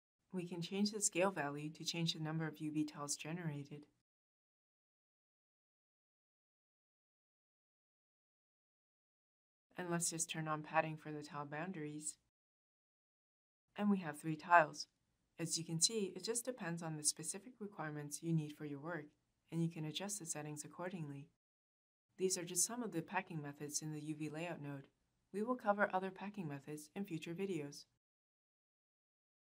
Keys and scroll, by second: 21.6 u.